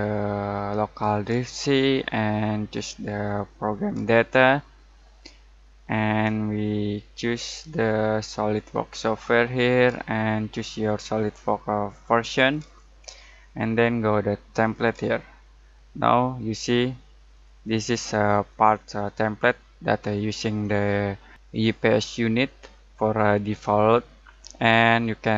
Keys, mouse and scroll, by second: 3.5 click, 6.9-9.1 drag, 12.2 click, 17.3 click.